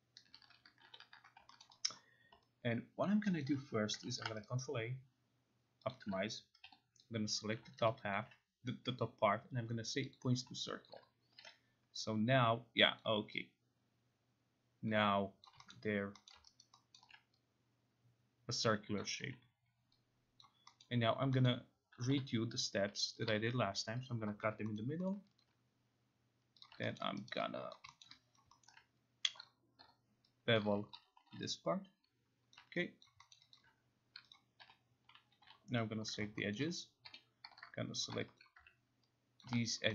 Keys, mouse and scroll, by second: 0.8 ctrl+y, 1.6 alt+middle click, 1.9 alt+click, 2.8 alt+click, 3.0 alt+click, 3.4 alt+click, 4.1 ctrl+a, 4.4 right click, 5.9 click, 6.6 0, 7.5 click, 7.9 alt+right click, 8.2 alt+click, 10.1 click, 10.8 alt+click, 11.4 t, 13.0 click, 15.4 alt+click, 15.7 middle click, 16.3 middle click, 16.6 alt+right click, 17.0 alt+middle click, 19.0 click, 19.2 e, 20.4 click, 20.8 middle click, 21.5 middle click, 21.9 k, 23.2 click, 24.1 shift+click, 24.4 Escape, 24.8 middle click, 25.1 middle click, 25.4 alt+click, 26.6 click, 27.0 alt+middle click, 27.3 alt+right click, 27.7 alt+click, 27.9 alt+middle click, 28.0 alt+middle click, 28.4 alt+click, 28.7 alt+middle click, 29.4 click, 29.8 9, 30.6 click, 30.9-31.8 typing, 32.5 click, 33.0 alt+click, 33.3 alt+middle click, 33.5 alt+click, 34.1 alt+middle click, 34.4 click, 34.6-35.9 typing, 36.2 click, 36.5 alt+middle click, 37.1 9, 38.0 shift+click, 38.4 alt+click, 39.7 alt+click.